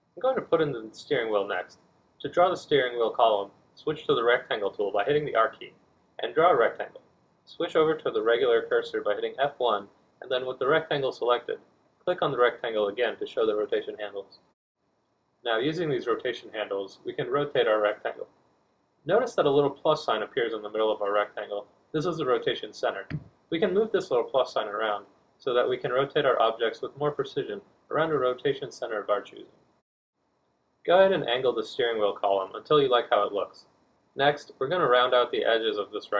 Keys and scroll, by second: 14.2 r, 16.8 F1.